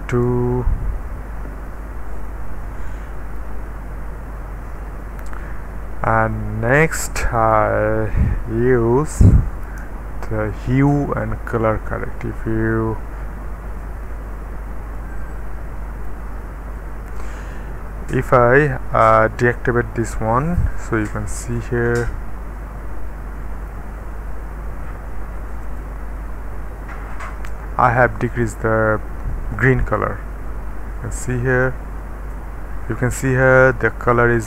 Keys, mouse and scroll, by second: 0.1 KP_Enter, 1.5-2.3 scroll up 1, 2.3-3.4 middle drag, 2.3-3.4 scroll up 1, 6.3-7.6 middle drag, 7.4 click, 9.6 Return, 14.1 middle click, 15.0-16.1 drag, 16.4-17.8 middle drag, 18.1 click, 21.0 d, 23.0-24.5 middle drag, 24.4-25.1 scroll up 1, 25.6 click, 25.6-26.1 typing, 29.5 click, 31.5 click, 31.8 d.